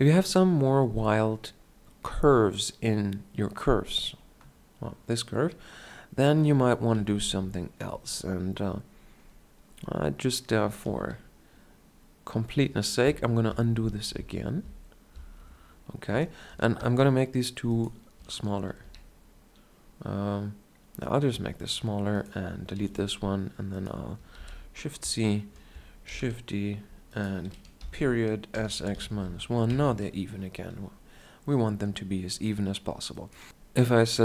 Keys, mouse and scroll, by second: 0.6 Tab, 4.1 middle click, 7.4 KP_7, 13.9 ctrl+z, 14.4 ctrl+z, 17.0 Tab, 19.1-19.5 shift+scroll down 1, 19.1 s, 23.0 x, 24.6 shift+c, 26.3 shift+d, 28.0 ., 28.8 s, 30.2 Tab.